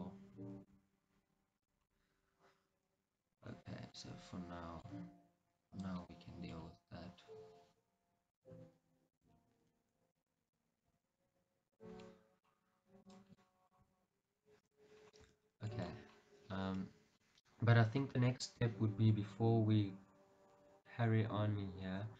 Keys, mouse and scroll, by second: 0.0-1.8 middle drag, 0.8 g, 1.8 click, 2.0-5.8 middle drag, 3.7 scroll down 2, 5.8 click, 6.2-8.5 middle drag, 6.7 g, 8.5 click, 9.2 click, 9.3 g, 10.7 click, 11.1 g, 11.8 click, 12.2 middle click, 13.1 click, 13.4 scroll up 1, 13.5-14.8 middle drag, 14.1 g, 14.8 click, 15.0 scroll, 15.6 Tab, 15.6-17.5 middle drag, 16.2 scroll down 1, 18.5-19.2 scroll down 2, 19.2-22.1 middle drag.